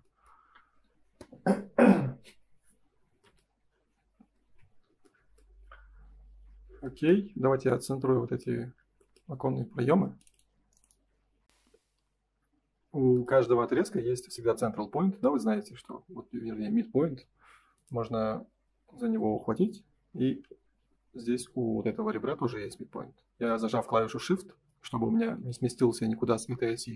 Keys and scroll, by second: 4.3 ctrl+s, 8.6 F3, 9.8 F4, 11.4 F4.